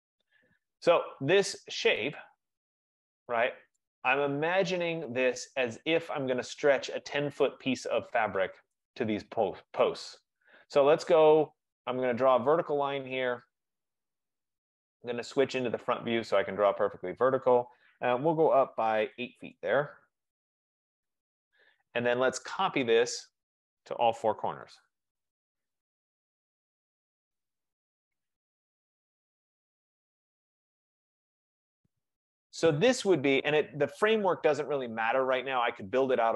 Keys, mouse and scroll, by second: 0.1 Return, 1.4 scroll, 1.6 middle click, 3.8 right click, 7.4 right click, 8.9 right click, 9.0 right click, 10.0 right click, 11.4 click, 13.5 click, 14.2 click, 14.9-16.3 scroll, 19.2-19.8 typing, 21.0 Return, 22.9-25.2 typing, 23.5 click, 27.0-27.7 typing, 27.1 click, 28.2 click, 29.9-30.6 typing, 30.3 click, 31.7 click, 32.5 Return, 33.6 click, 35.6 click, 35.7 click.